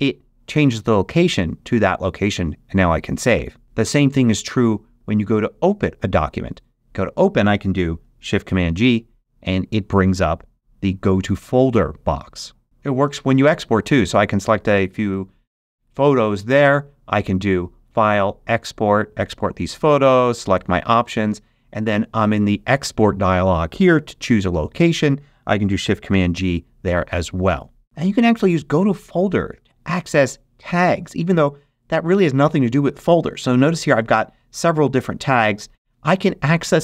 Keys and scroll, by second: 8.6 shift+super+g, 26.0 shift+super+g.